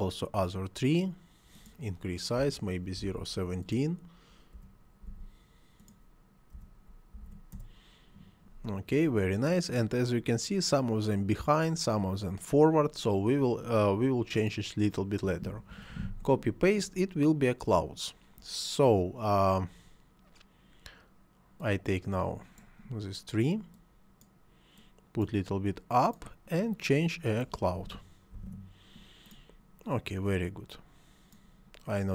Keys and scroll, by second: 2.4 ., 3.0 1, 3.1 7, 4.6 ., 5.0 1, 6.2 7, 6.6 ., 7.1 1, 7.5 Return, 15.5 ctrl+c, 15.7 ctrl+v, 27.8 c, 28.3 l, 28.5 o.